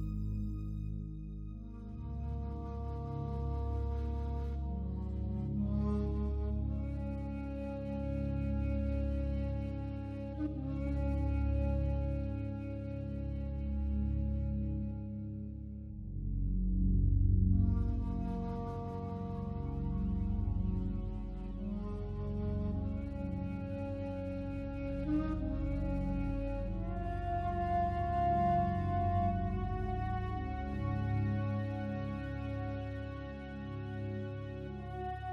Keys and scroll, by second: 25.0 ctrl+d.